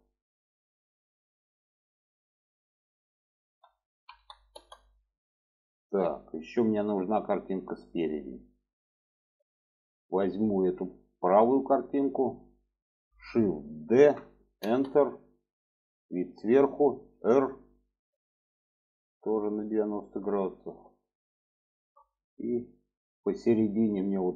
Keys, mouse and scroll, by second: 0.1-4.7 drag, 5.2-8.2 middle drag, 8.4-9.6 middle drag, 10.5 click, 13.8 shift+d, 15.1-16.4 middle drag, 17.1 r, 20.1-21.0 middle drag, 21.7 shift+middle click, 22.4 shift+middle click.